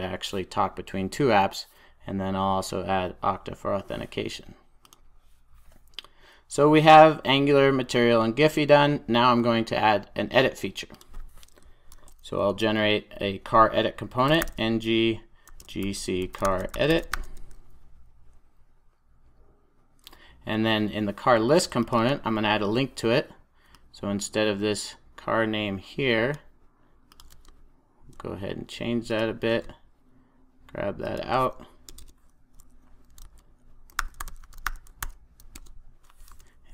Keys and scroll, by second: 35.0 super+j, 36.2 super+s.